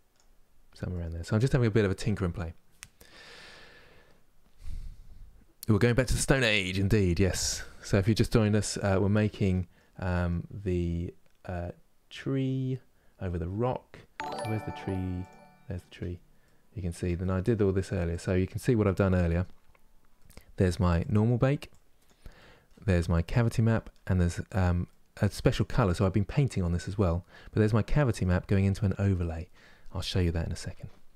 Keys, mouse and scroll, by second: 0.2-0.6 scroll down 1, 0.6-8.6 middle drag, 8.6 scroll down 1, 9.1-15.2 middle drag, 15.2 click, 16.1-17.9 middle drag, 17.9 click, 21.4 click, 25.1-31.1 drag.